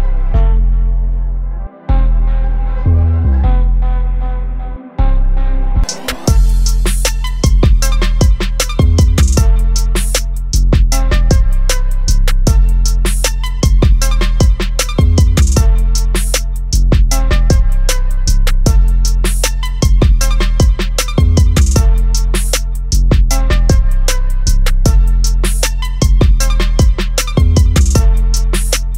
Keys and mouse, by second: 4.7 click, 4.7 typing, 8.0 click, 11.0 click, 13.6 click, 18.0 right click, 19.4 click, 22.8 click, 25.8 click.